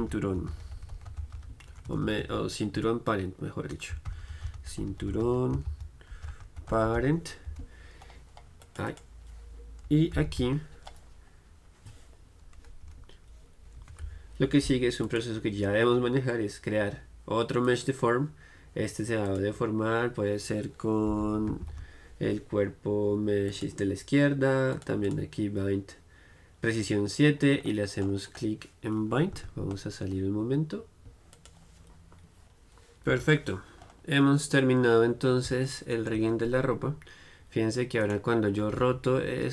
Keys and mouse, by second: 2.0 BackSpace, 8.7-21.3 drag, 24.8-27.1 drag, 28.1-29.8 middle drag, 29.4 z, 29.9-32.4 middle drag, 32.4-36.3 drag, 33.2 KP_1, 38.1-39.5 right drag.